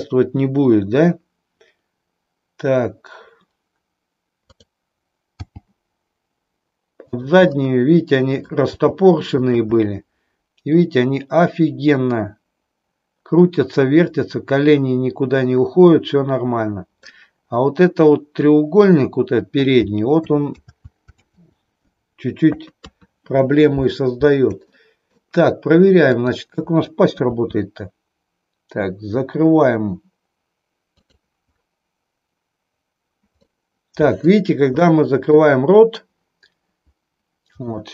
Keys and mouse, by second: 4.4 click, 5.3 g, 7.2 click, 7.6-8.6 middle drag, 8.8 g, 9.8-16.9 middle drag, 20.6 ctrl+z, 22.4 KP_2, 24.7 shift+middle click, 26.2 click, 27.2 r, 30.9 click, 33.4 middle click, 34.8 shift+middle click, 37.6 middle click.